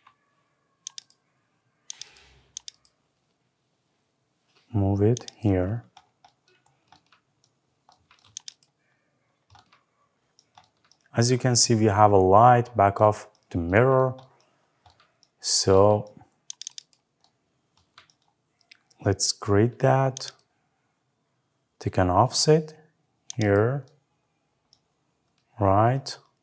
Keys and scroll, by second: 26.3 Escape.